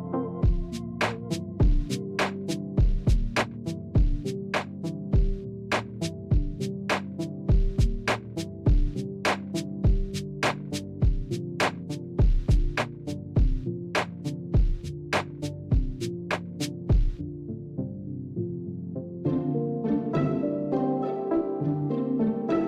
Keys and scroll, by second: 6.2 Return.